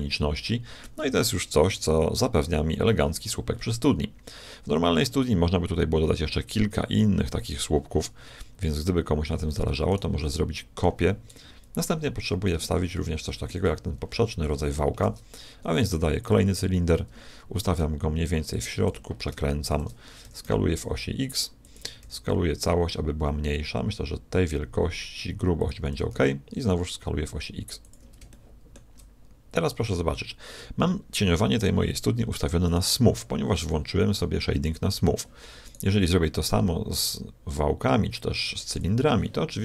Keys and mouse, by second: 2.7 middle click, 9.9 right click, 10.3-11.7 middle drag, 11.4 KP_1, 11.8 middle click, 11.8 KP_1, 12.9 middle click, 15.1 shift+a, 17.1 g, 18.9 r, 20.2 s, 22.0 s, 25.9 s, 28.3-30.1 shift+middle drag, 32.7 right click, 33.5-34.6 drag, 35.7-37.6 drag, 38.7-39.6 drag.